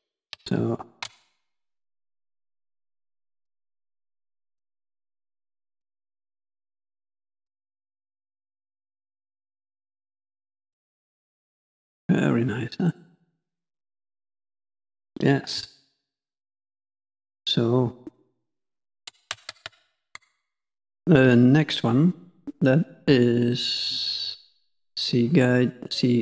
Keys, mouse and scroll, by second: 0.2 KP_5, 0.5 KP_1, 12.1 middle click, 13.3 middle click, 14.4 middle click, 19.6 ctrl+z, 20.4 middle click.